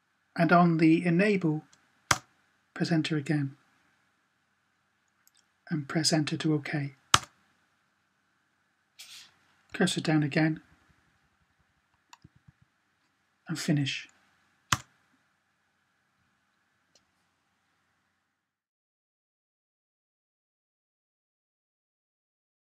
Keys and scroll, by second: 9.5 Down, 9.8 typing, 9.9 Down, 10.1 Down, 10.3 Down, 10.4 Down, 10.6 Down, 10.8 Down, 11.0 Down, 11.1 Down, 11.3-12.3 typing.